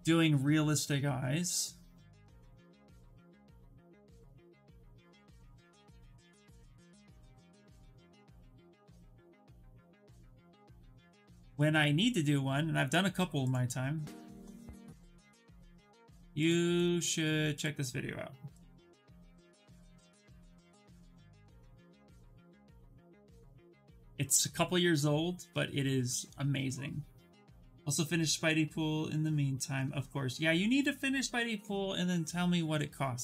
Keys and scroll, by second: 3.1-7.4 typing, 8.9-10.5 typing, 19.9 ctrl+v, 20.4 Return.